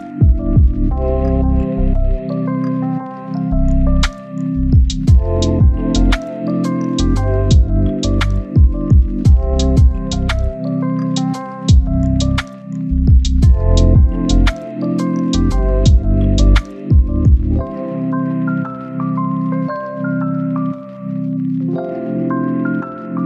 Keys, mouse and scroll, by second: 0.7 right click, 1.6 click, 2.4-4.0 right drag, 4.0 scroll down 1, 4.1 scroll up 1, 4.2-5.7 right drag, 5.7-6.4 scroll up 1, 6.4 click, 6.5 scroll down 1, 6.6 scroll up 1, 6.7 right click, 7.4 click, 8.1-8.8 scroll down 1, 8.8 click, 9.0 right click, 9.4 scroll up 1, 9.9-12.3 drag, 12.6 scroll down 1, 12.7-13.3 scroll up 1, 13.3 click, 16.0 scroll up 1, 16.2 click, 17.2 scroll down 1, 17.3-17.7 scroll up 1, 17.7 click, 18.0 scroll up 1, 18.3 click, 18.9 scroll down 1, 19.0-19.5 scroll up 1, 20.3-21.8 drag, 22.0 scroll down 1, 22.2-23.2 scroll up 1.